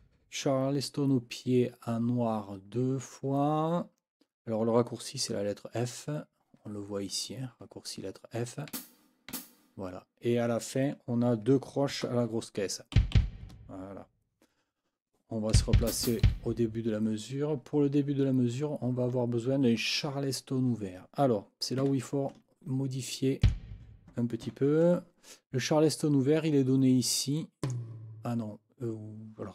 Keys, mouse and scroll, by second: 8.7 f, 11.9 KP_4, 13.0 b, 15.5 Left, 16.3 Left, 21.8 Escape, 23.4 click, 24.4 n, 27.6 click.